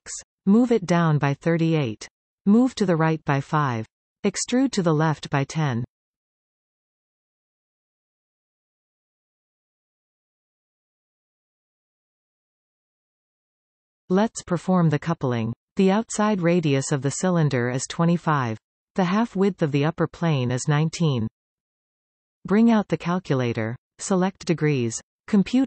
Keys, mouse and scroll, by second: 3.4-4.4 scroll down 1, 4.4 g, 10.2 g, 12.4 e.